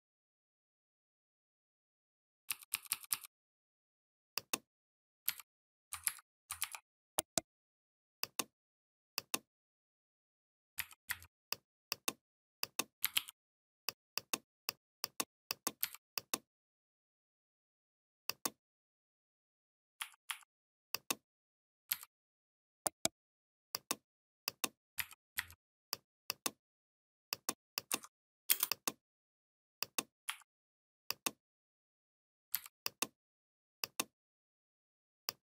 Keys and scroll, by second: 2.3 i, 5.0 v, 5.9 ctrl+c, 6.4 ctrl+f, 10.6 4, 10.9 5, 15.6 v, 19.8 a, 21.7 v, 24.8 4, 25.2 5, 28.3 space, 30.1 a, 32.3 v.